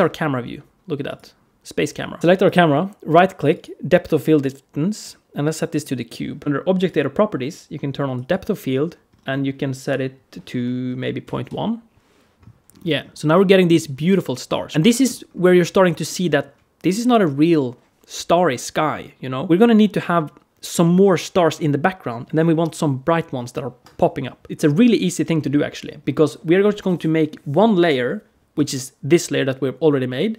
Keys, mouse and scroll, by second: 1.2 scroll up 1, 2.2 right click, 6.6 click, 8.1 click, 8.9-9.7 scroll down 3, 9.7 click, 12.5-13.0 scroll up 4, 13.3 shift+middle click, 14.6 scroll down 2, 14.7 shift+middle click, 15.1-15.5 scroll up 2, 24.5 shift+middle click, 25.8-28.8 scroll down 1.